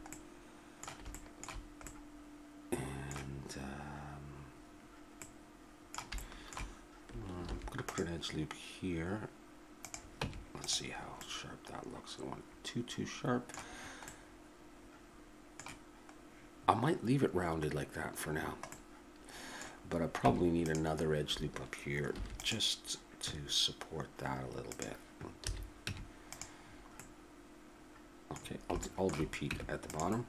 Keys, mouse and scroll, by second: 0.7 middle click, 5.6 middle click, 7.5 ctrl+r, 8.0 middle click, 10.2 Tab, 10.9 middle click, 18.4-20.2 middle drag, 20.2 Tab, 22.1 ctrl+r, 25.4 a, 25.9 Tab, 29.4 Tab.